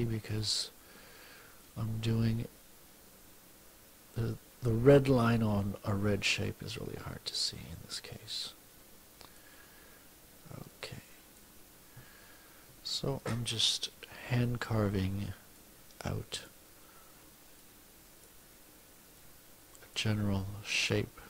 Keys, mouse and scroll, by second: 1.6-4.8 drag, 8.3-9.6 drag, 10.7 click, 14.5 F2, 15.6 click, 17.6 click, 19.2 click.